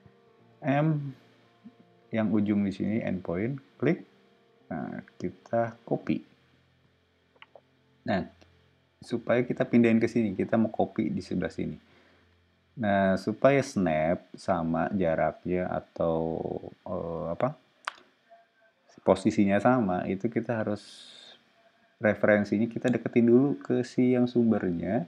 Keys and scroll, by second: 0.6 m.